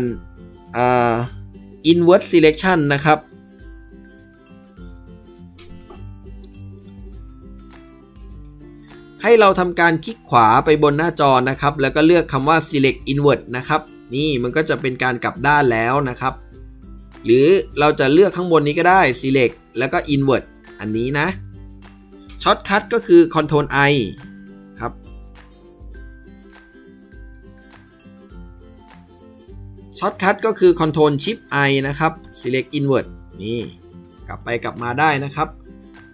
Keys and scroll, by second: 23.3 ctrl+i, 24.3 ctrl+i, 31.4 ctrl+shift+i, 32.1 ctrl+shift+i, 33.5 ctrl+shift+i.